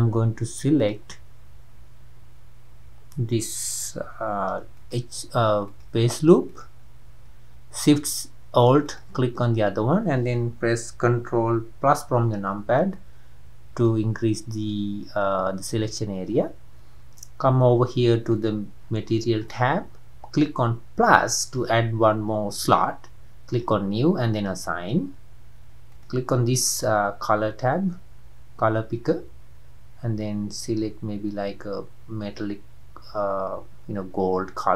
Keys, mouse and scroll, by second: 0.9 click, 5.8 click, 6.6 alt+click, 12.2 ctrl+KP_Add, 13.9 scroll up 1, 13.9-21.7 middle drag, 21.7-24.9 drag, 24.9-26.1 scroll down 1, 26.1 scroll down 1.